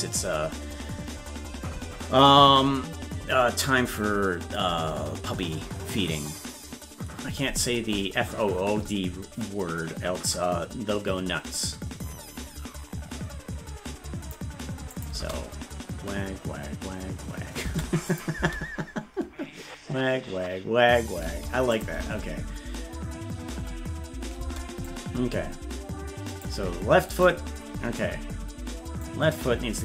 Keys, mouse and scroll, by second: 10.2-14.3 drag, 14.9 click, 15.1 space, 18.1 click, 18.3 space, 21.7 click, 21.7 space, 24.8-26.4 drag, 24.8 space, 27.3-29.0 right drag, 29.0-29.8 drag.